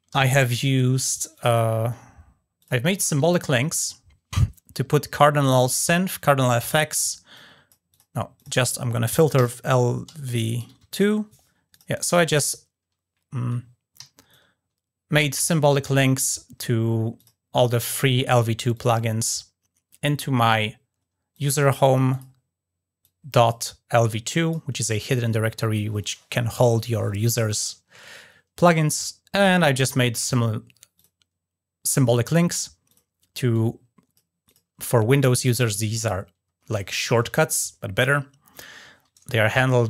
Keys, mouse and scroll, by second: 1.1 click, 2.3 click, 5.3-5.7 drag, 6.2 ctrl+drag, 6.7 drag, 7.1-7.5 drag, 7.7 drag, 8.1 click, 11.5 click, 11.7 click, 14.1-15.2 alt+drag, 16.9 click, 18.5 click, 21.1 click, 21.9 click, 22.8 click, 24.1 click, 30.7 click, 32.6 click, 33.3-33.9 drag, 34.2 click, 35.4 click, 38.3 click.